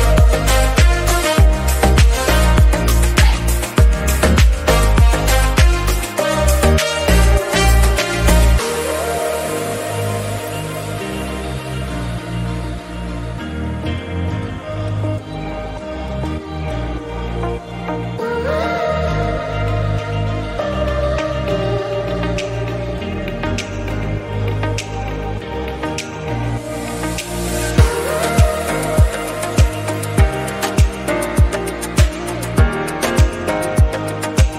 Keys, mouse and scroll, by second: 0.1 /, 1.7 drag, 2.1 click, 2.4 click, 2.6-3.9 scroll down 2, 3.9 click, 4.7-5.5 middle drag, 5.5 drag, 5.7 click, 6.1 Tab, 6.5 click, 6.8 3, 9.2 middle click, 10.2 ctrl+r, 10.8 middle click, 11.7 click, 12.2 middle click, 12.4 Tab, 12.6 middle click, 13.4 drag, 13.7-14.5 middle drag, 14.5 Tab, 14.7-16.3 middle drag, 16.5 click, 17.3 Tab, 17.9 KP_1, 18.6 /, 19.3 KP_1, 19.8 scroll up 1, 20.0-20.7 shift+middle drag, 20.7 click, 22.1 alt+z, 22.3 click, 22.6 click, 23.2 drag, 24.2 click, 24.5 click, 24.9-26.4 right drag, 26.4 click, 27.9 alt+z, 28.9 click, 29.2 scroll down 1, 29.3-30.2 middle drag, 30.2 scroll up 2, 30.4 middle click, 30.6 drag, 31.3 s, 32.5 click, 32.7 middle click, 33.2 scroll up 2, 33.4 click, 34.0 /.